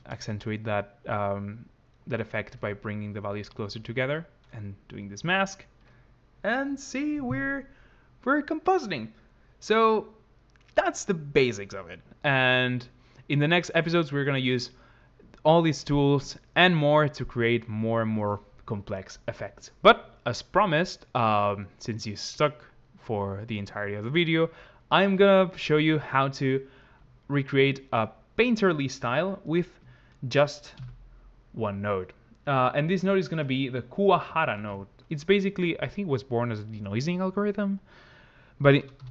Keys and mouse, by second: 1.8 shift+click, 30.7 ctrl+x, 31.8 click.